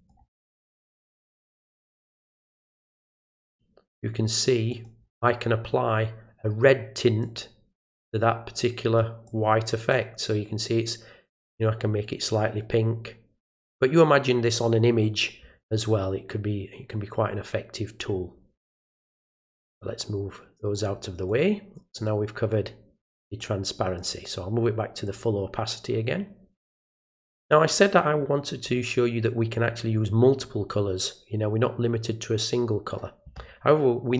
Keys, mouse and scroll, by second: 0.0 click, 1.3 click, 2.0 click, 2.4 click, 2.8 click, 4.7 click, 7.2 click, 8.6 click, 9.3 click, 9.9-18.0 drag, 19.3 click, 20.7 click, 22.0 click, 23.4 click, 25.0 click.